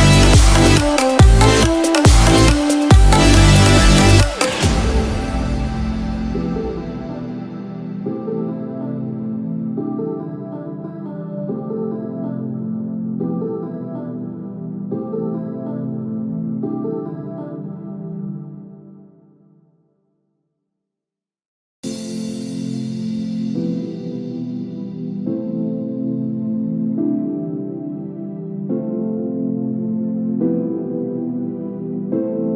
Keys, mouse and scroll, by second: 0.2 click, 0.2 click, 7.1 click, 7.1 scroll down 7, 7.6 click, 11.0 click, 11.0 middle click, 11.0-12.1 scroll up 6, 13.1 click, 19.7 click, 20.7 click, 24.8 middle click, 24.8 click, 24.8 scroll down 7, 27.6 click, 27.6 middle click, 27.6-27.9 scroll up 6, 28.9 click.